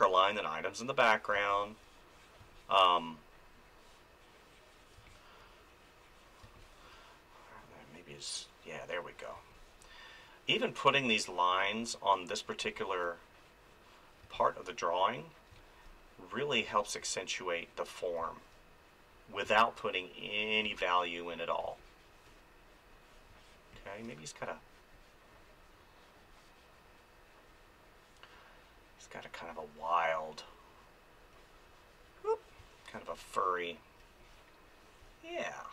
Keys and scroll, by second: 1.3 space, 5.0 space, 9.3 space, 11.1 space, 23.3 space, 32.6 space.